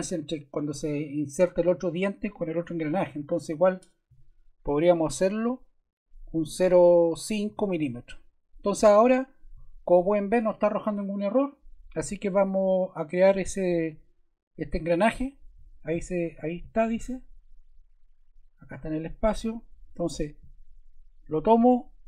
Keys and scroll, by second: 4.1 0, 5.1 ., 7.4 5.